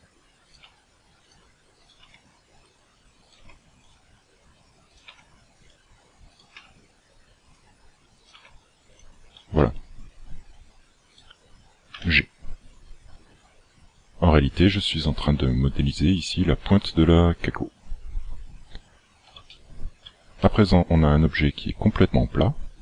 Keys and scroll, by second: 0.7 g, 2.0 g, 3.4 g, 5.1 g, 6.6 g, 8.4 g, 12.0 g.